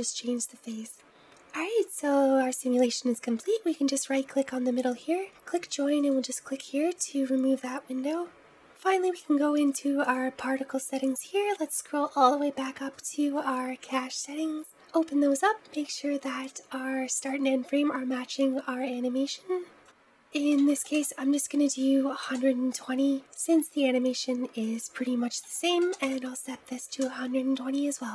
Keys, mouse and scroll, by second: 2.0-4.7 scroll up 2, 4.7 middle click, 4.7-5.2 scroll up 1, 5.2-7.1 right drag, 7.1-9.7 scroll down 2.